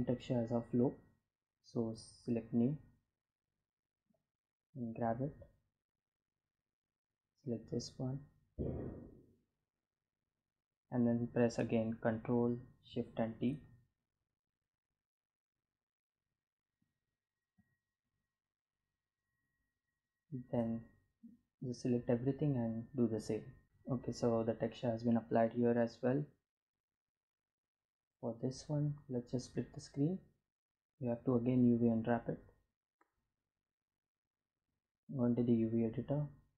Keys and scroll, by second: 2.2 g, 11.4 ctrl+shift+t, 35.9 Tab.